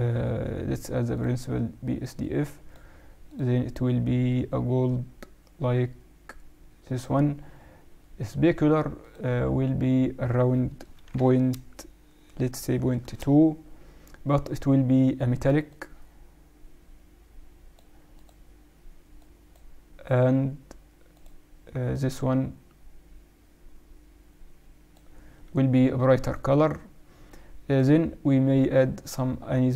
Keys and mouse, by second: 2.1-5.1 drag, 8.9-10.8 drag, 15.6-17.4 drag, 18.1-19.9 drag, 20.0 click, 26.2-28.1 drag, 28.7-29.7 drag.